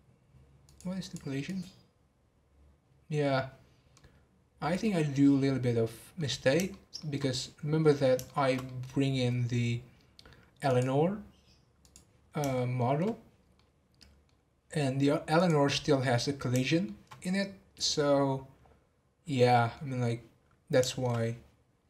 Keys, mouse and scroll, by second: 0.6 click, 1.0 click, 1.4 click, 3.9-4.9 middle drag, 4.9-5.4 scroll down 2, 5.4-10.7 middle drag, 10.7 click, 11.8 click, 12.5-14.4 shift+middle drag, 14.4-15.4 scroll down 1, 15.4 click, 16.7-21.8 shift+middle drag.